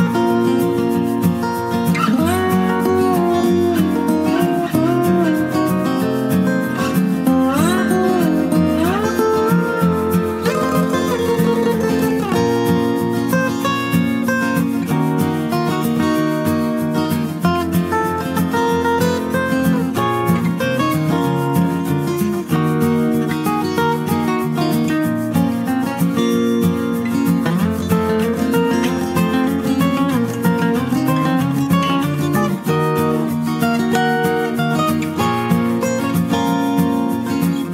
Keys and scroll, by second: 13.3 typing.